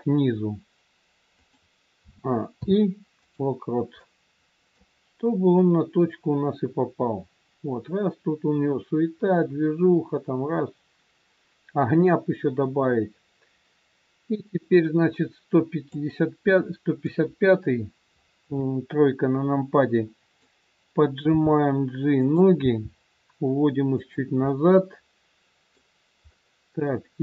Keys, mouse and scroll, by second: 1.9 a, 2.5 i, 4.0 middle click, 5.6 click, 16.4 middle click, 18.4 KP_3, 19.2 scroll up 2, 19.7 click, 21.3 g, 22.5 g, 24.4 middle click.